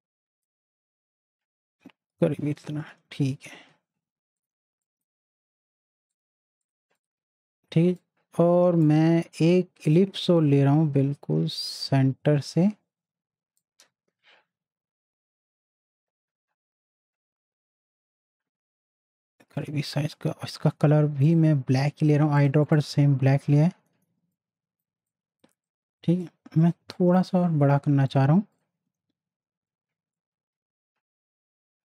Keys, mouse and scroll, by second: 7.2 z, 8.0-9.8 drag, 13.5 click, 13.6-20.5 drag, 20.5 i, 21.2 click, 22.9 z, 23.5 Caps_Lock, 23.9 z, 24.3 click, 24.9 space, 25.1 click, 25.4 space, 25.6 click, 26.8 space, 26.9 click, 30.2-31.9 alt+shift+drag.